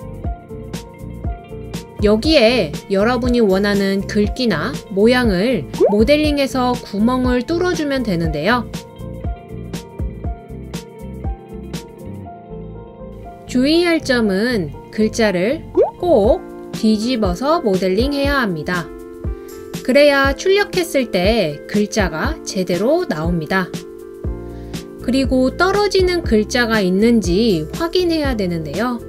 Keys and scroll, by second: 7.3-10.4 typing.